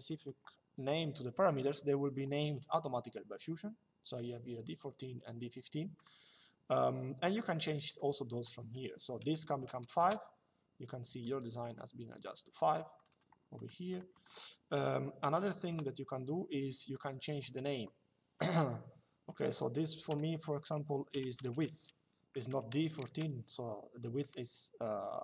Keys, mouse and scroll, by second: 5.7 click, 6.9 click, 9.3 KP_5, 12.7 click, 14.5 KP_1, 15.4 Return, 16.7 click, 22.8 Return.